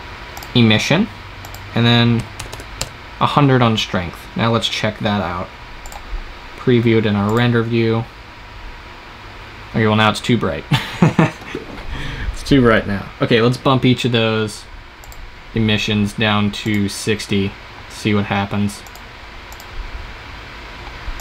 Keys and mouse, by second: 1.3-2.4 drag, 2.4 KP_0, 6.9 click, 15.6-17.2 drag, 18.7-21.2 drag.